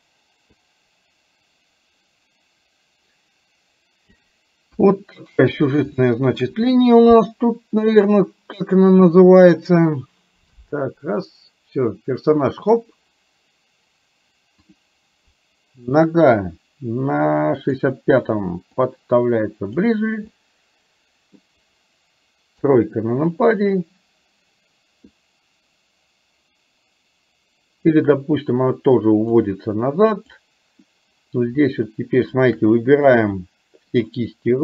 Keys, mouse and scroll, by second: 0.6-4.2 drag, 4.8 KP_1, 6.1 shift+middle click, 8.1-13.0 drag, 14.6 click, 17.7 click, 19.0-20.0 drag, 20.3-21.5 middle drag, 22.7 KP_3, 28.1-29.6 drag, 30.2 click, 32.3 shift+click, 32.8 middle click, 34.1 shift+click.